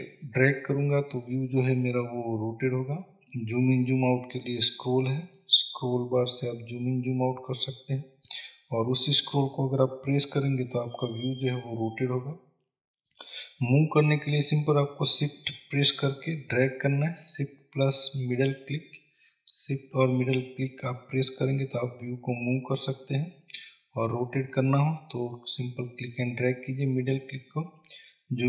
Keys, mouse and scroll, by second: 4.0-4.6 scroll up 2, 4.6-5.5 scroll down 2, 5.5-6.4 scroll up 2, 6.4-7.1 scroll down 2, 7.1-8.2 scroll up 2, 16.1-20.3 shift+middle drag, 20.6-22.1 middle drag, 22.2-23.1 middle drag, 24.0-24.3 scroll up 2, 24.3 middle click, 25.0-25.9 scroll down 2, 25.9-28.4 middle drag.